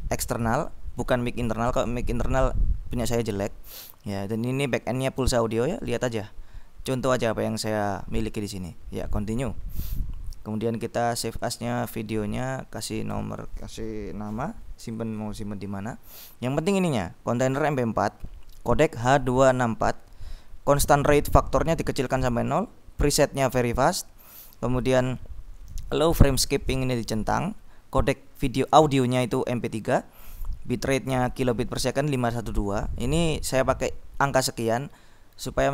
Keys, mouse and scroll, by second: 9.1 click, 11.3 click, 12.5 Delete.